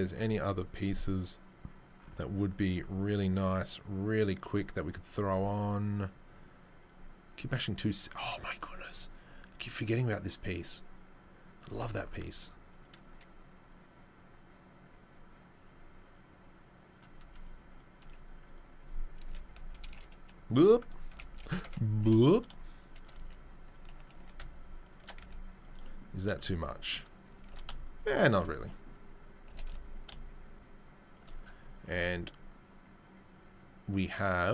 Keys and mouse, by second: 15.1-16.6 drag, 16.6-26.8 middle drag, 18.0 g, 19.2 r, 22.0 r, 22.0 g, 23.1 s, 23.8 g, 25.2 z, 27.3 g, 27.7 shift+middle click, 30.1-34.5 shift+middle drag.